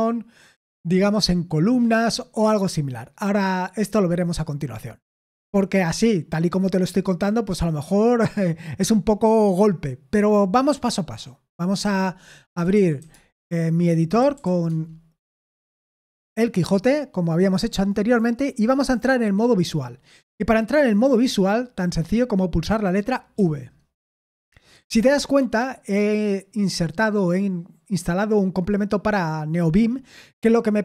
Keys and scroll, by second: 11.8-14.9 typing, 16.2 Return, 23.3 v.